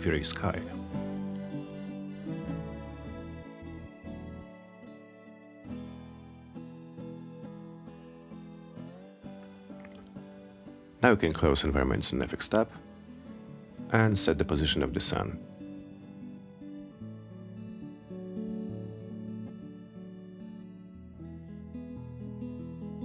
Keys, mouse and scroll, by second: 2.9 click, 6.3 click, 8.8 click, 10.7-12.1 alt+middle drag, 12.6 w, 13.4-15.1 drag, 15.5-16.3 alt+middle drag, 16.6-17.7 alt+middle drag, 18.7-22.0 drag.